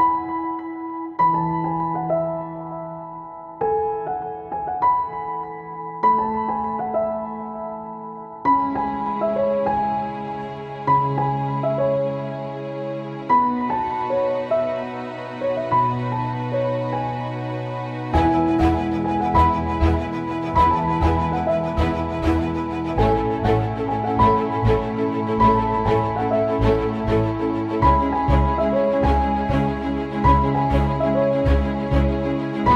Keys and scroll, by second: 3.6 space, 4.1 alt+space, 7.4 space.